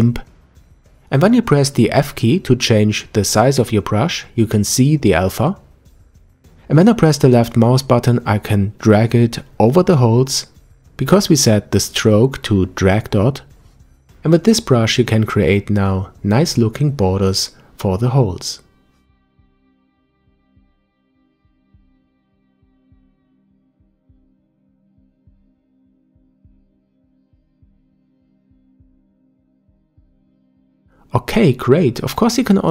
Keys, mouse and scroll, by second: 0.0 f, 3.3 scroll up 1, 4.2 f, 8.5-10.5 drag, 14.3-17.4 drag, 19.4-22.5 drag, 25.8-26.5 scroll down 3, 26.5 scroll down 2, 27.3-30.3 middle drag, 31.2 click, 31.4-32.7 middle drag.